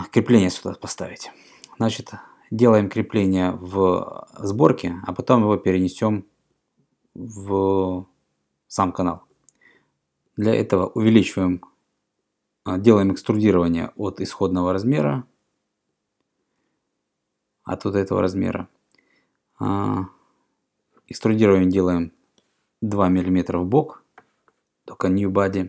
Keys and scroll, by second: 18.1 e, 23.0 2.